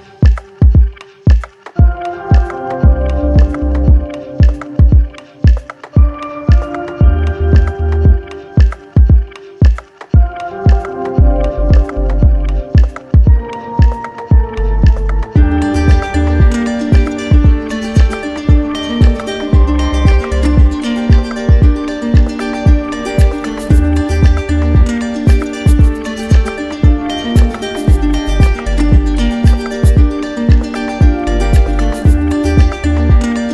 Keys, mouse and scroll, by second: 0.0 shift+click, 0.1 shift+click, 0.2 right click, 0.3 shift+click, 0.4 shift+right click, 0.5 alt+right click, 0.5 alt+right click, 0.7 right click, 0.7 shift+click, 0.8 shift+click, 0.9 shift+click, 0.9 right click, 1.0 shift+click, 1.1 shift+click, 1.2 right click, 1.3 shift+click, 1.4 right click, 1.4 alt+right click, 1.5 alt+right click, 1.6 alt+right click, 1.7 alt+right click, 4.4 click, 6.7-11.5 drag, 11.7 alt+click, 13.1 alt+click, 14.6 alt+click, 15.1 click, 16.8 click, 17.4 alt+click, 20.3 alt+click, 20.8 alt+click, 22.5 alt+click, 23.0 alt+right click, 25.2 z, 26.8 click, 28.3 right click, 32.0 click, 33.0 click.